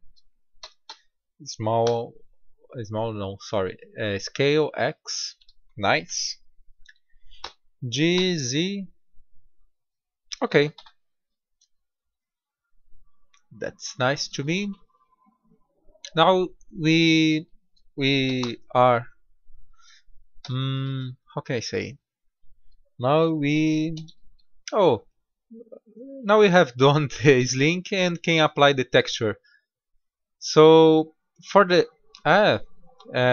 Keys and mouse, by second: 0.6 s, 5.0 middle click, 7.4 g, 10.7 Tab, 13.4-14.1 middle drag, 14.8-16.6 middle drag, 17.4-18.3 middle drag, 18.3 shift+a, 20.3 s, 21.4 s, 23.0-23.8 right drag, 23.8 drag, 23.8 g, 27.5-28.1 middle drag, 29.0-31.0 middle drag, 31.1-33.3 middle drag.